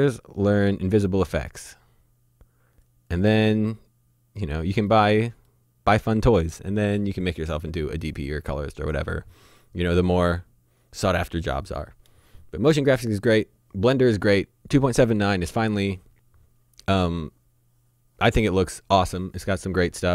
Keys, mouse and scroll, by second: 1.8 right click, 3.1 click, 3.5 middle click.